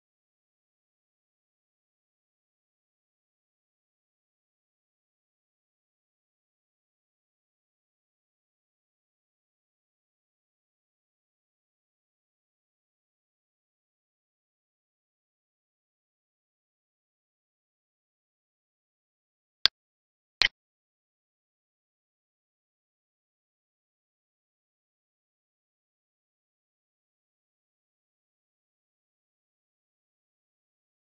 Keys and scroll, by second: 4.7 Right, 5.9 space, 9.4 ctrl+space, 11.6 Down, 13.1 Right, 16.4 alt+e, 23.8 alt+e, 24.5 space, 25.6 space, 27.5 ctrl+s, 30.7 End.